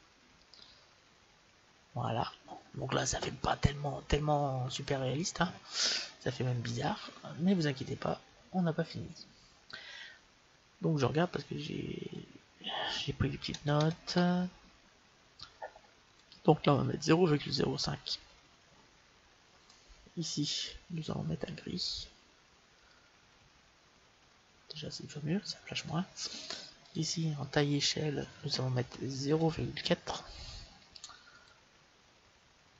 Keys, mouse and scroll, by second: 11.9-13.8 drag, 20.5-22.3 drag, 26.7-28.6 drag.